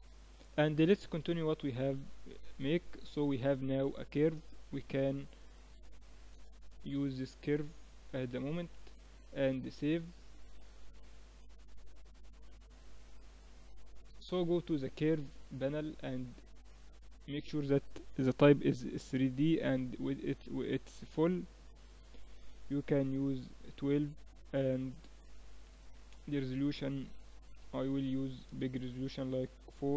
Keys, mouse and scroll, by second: 2.1 middle click, 2.6 Tab, 4.6 Tab, 6.7-7.7 middle drag, 7.7 click, 8.7 ctrl+s, 10.2 Tab, 13.7-21.0 drag, 23.5-25.5 middle drag, 26.1-27.9 drag.